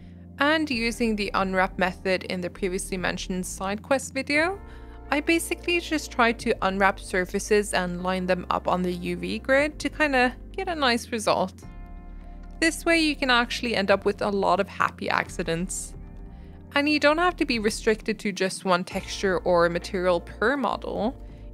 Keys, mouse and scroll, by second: 0.0 u, 0.5 u, 1.3 r, 2.0 g, 2.6 Tab, 2.8 middle click, 2.9 scroll up 1, 3.0 shift+middle click, 3.2 Tab, 3.4 click, 3.9 u, 4.2 g, 4.7 Tab, 4.8-5.3 middle drag, 5.3 Tab, 5.4 g, 7.1 s, 7.4 s, 7.8 g, 8.3 Tab, 8.4 middle click, 8.7 Tab, 8.8 s, 9.4 Tab, 9.6 middle click, 9.8 scroll up 1, 9.9-10.3 middle drag, 10.3 Tab, 10.5 s, 12.0 g, 13.0 Tab, 13.3 Tab, 13.8-15.3 drag, 15.7 click, 16.0 e, 16.2 Tab, 16.3 scroll down 1, 16.4 middle click, 16.5 scroll up 1, 16.6 middle click, 16.8 Tab, 17.0 click, 17.9 u, 18.1 s, 18.7 Tab, 18.9 scroll down 1, 19.0 middle click, 19.1 Tab, 19.3 click, 19.7 u, 19.9 s, 20.6 r, 21.1 g, 21.3 Tab.